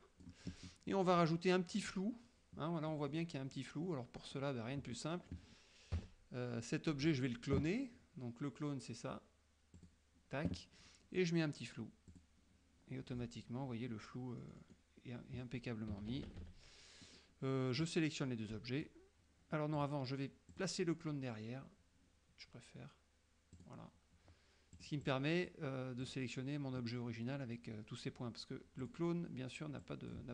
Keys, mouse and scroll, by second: 3.0 middle click, 3.0-3.4 scroll down 1, 4.0 middle click, 4.0-4.7 scroll down 1, 5.1 middle click, 5.1-5.6 scroll down 1, 6.1 KP_Subtract, 9.8 click, 12.2 click, 14.5 middle click, 16.2 KP_Subtract, 17.9-19.1 drag, 19.8 click, 20.6 click, 23.6 click, 24.8 click, 26.1 click, 28.9 click, 29.9-30.3 drag.